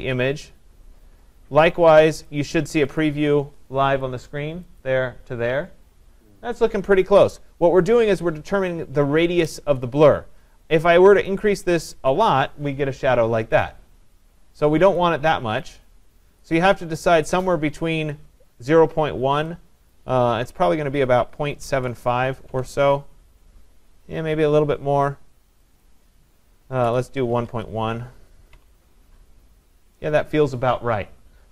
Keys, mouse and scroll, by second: 2.3 click, 3.0 click, 4.0 click, 4.8 click, 11.3 click, 15.0 click, 19.9 click, 21.4-21.8 typing, 22.5 Tab, 25.9 click, 26.6-27.5 typing, 28.6 Tab.